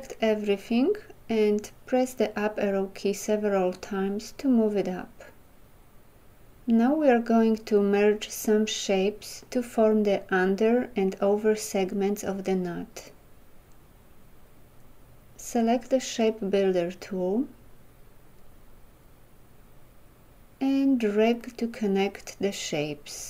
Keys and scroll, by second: 2.1 Up.